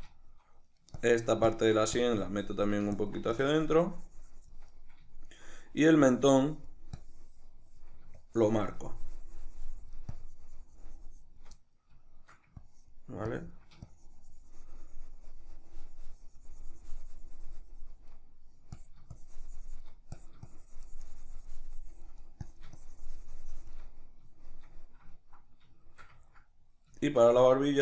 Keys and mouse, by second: 0.2 shift+middle click, 1.0-4.8 ctrl+drag, 4.8-6.1 middle drag, 6.1-11.6 drag, 11.6-12.6 middle drag, 12.6-18.2 ctrl+drag, 18.2 middle click, 18.8-23.9 drag, 23.9-27.8 middle drag.